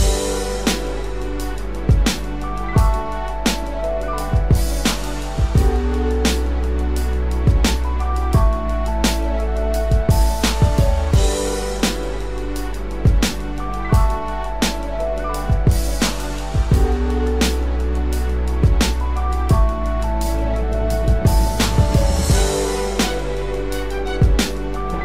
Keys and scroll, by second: 21.0 ctrl+z.